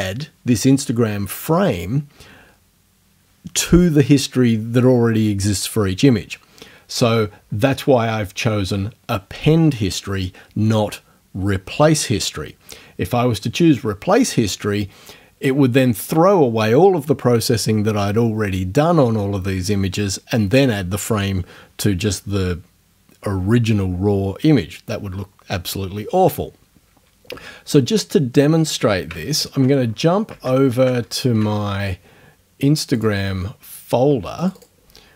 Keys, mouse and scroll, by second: 33.0 click, 34.4 click.